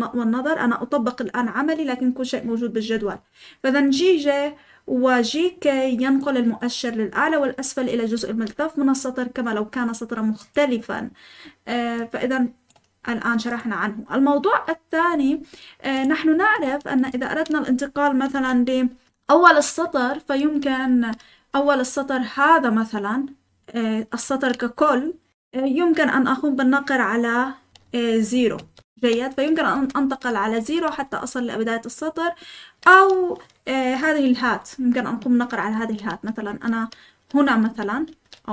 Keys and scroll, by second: 18.3 Escape, 18.6-21.2 typing, 28.3 0, 28.9 0, 29.7 Escape, 29.9-31.3 typing, 34.4 ^, 35.7 ctrl+h, 36.4-38.5 typing.